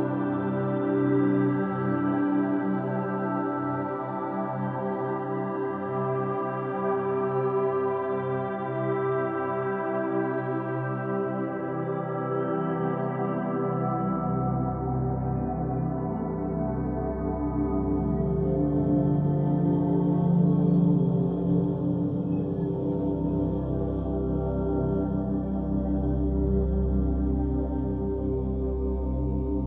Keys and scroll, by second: 9.3-10.2 typing.